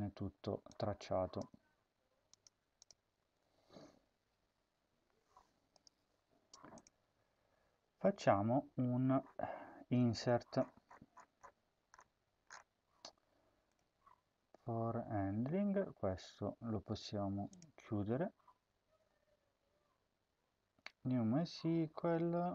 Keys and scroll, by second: 1.3 Tab, 3.1 ctrl+s.